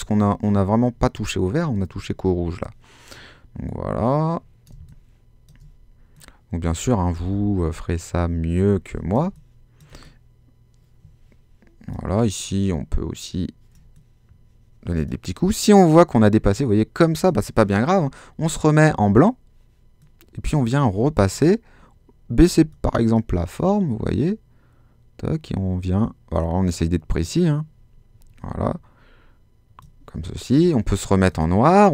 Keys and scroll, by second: 4.7 space, 9.2 space.